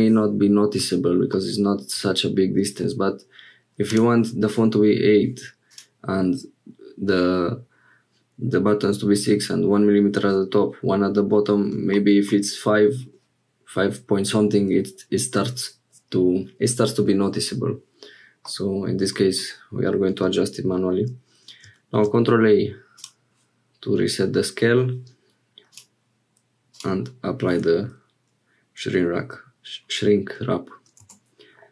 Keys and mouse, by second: 3.9 click, 18.4-19.4 drag, 21.9 ctrl+a, 25.7 click, 26.7 click, 31.0 Tab.